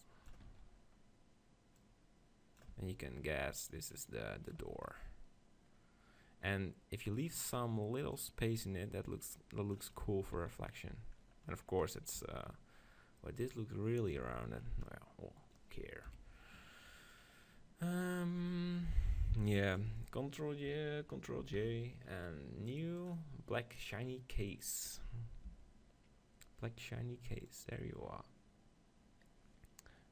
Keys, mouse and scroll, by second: 0.5 Tab, 0.5 z, 1.8-5.6 drag, 2.8 Tab, 4.6 Tab, 7.5-9.8 middle drag, 8.2-10.0 drag, 10.0 middle click, 10.4 z, 11.0 z, 12.2 Tab, 14.3 Tab, 14.6-16.8 drag, 16.1 KP_1, 19.5 b, 21.4 ctrl+j, 23.1-27.6 drag.